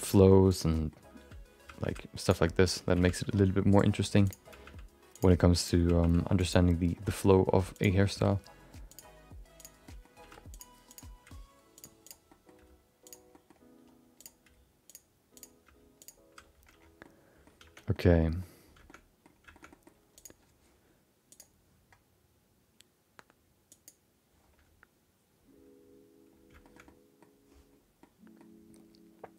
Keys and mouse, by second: 0.5 click, 0.7 middle click, 1.7 g, 2.9 g, 4.2 click, 4.5 g, 5.6 click, 5.8 g, 6.9 middle click, 7.7 click, 8.1 r, 9.5 click, 9.8 middle click, 10.2 r, 10.9 click, 11.2 g, 12.0 click, 12.2 middle click, 12.5 g, 13.3 middle click, 14.2 click, 14.4 g, 15.3 click, 15.6 g, 17.0 middle click, 17.9 Tab, 17.9 middle click, 18.8 shift+middle click, 19.0 middle click, 19.5 shift+middle click, 19.7 middle click, 21.3-25.8 drag, 26.6 shift+middle click, 26.8 middle click, 28.0 middle click.